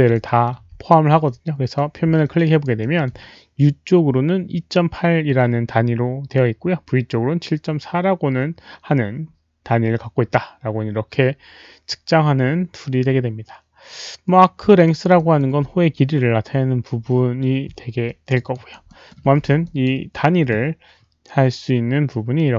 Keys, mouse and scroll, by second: 0.1 alt+middle click, 1.2 alt+click, 2.2 alt+click, 2.4 alt+right click, 2.8 alt+middle click, 3.0 alt+click, 11.9 alt+middle click, 11.9 alt+right click, 11.9 alt+click, 13.1 alt+right click, 14.8 alt+right click, 15.1 alt+middle drag, 18.0 alt+click, 18.5 alt+right click, 18.8 alt+middle click, 19.1 alt+click, 19.4 w, 19.6 click, 22.3 alt+click, 22.3 alt+middle click, 22.3 alt+right click, 22.3 w.